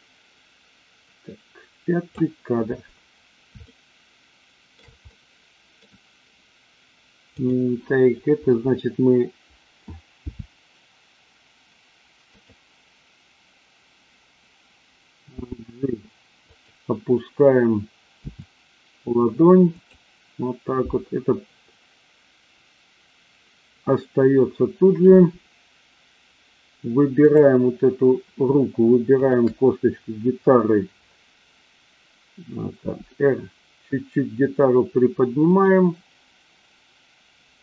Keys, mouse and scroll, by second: 3.6-4.9 shift+middle drag, 5.1-5.8 middle drag, 7.4 click, 10.3 g, 15.4 g, 16.4 click, 18.1 r, 19.6 click, 27.1 click, 29.1 shift+click, 32.9 r, 35.4 click.